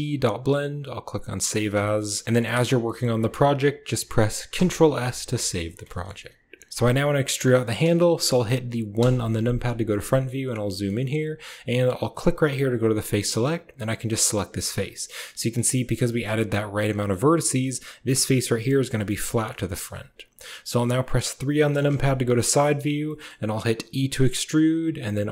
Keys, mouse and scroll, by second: 1.7 shift+click, 2.0 shift+click, 2.2 shift+click, 2.7 click, 4.6 ctrl+s, 5.3 shift+click, 5.5 shift+click, 5.8 shift+middle click, 6.7 KP_7, 6.8 middle click, 8.8 KP_1, 10.0 shift+middle click, 10.6 shift+click, 12.6 click, 13.6 click, 14.4 shift+click, 15.1 click, 15.6 click, 15.9 click, 16.8 shift+click, 18.8 click, 19.3-19.7 drag, 21.4 KP_3, 22.3 shift+middle click, 22.9 shift+middle click, 23.9 e, 25.1 r.